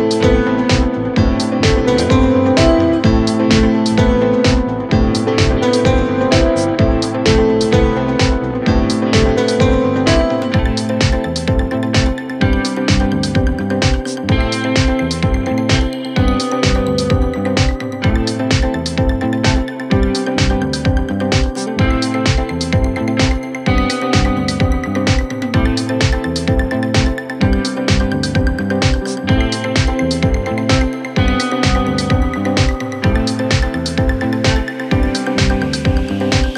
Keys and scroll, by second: 0.0 F3, 0.8 ctrl+r, 32.5 shift+Page_Up.